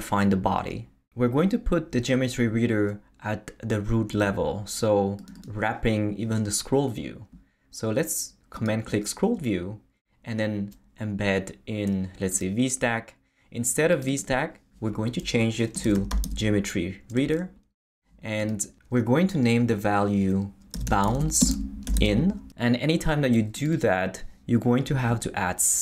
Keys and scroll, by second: 15.6-16.7 typing, 17.2 Return, 20.5-22.4 typing.